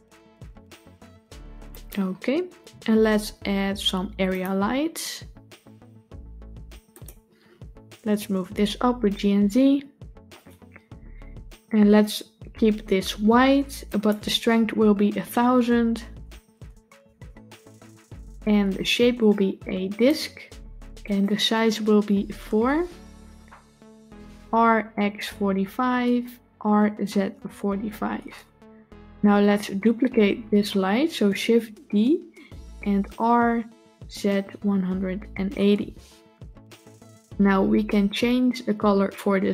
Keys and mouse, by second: 4.3-6.9 drag, 7.8 g, 13.7-17.4 drag, 16.8 KP_0, 19.0-19.9 drag, 20.9-22.3 drag, 26.5 r, 31.7 shift+d.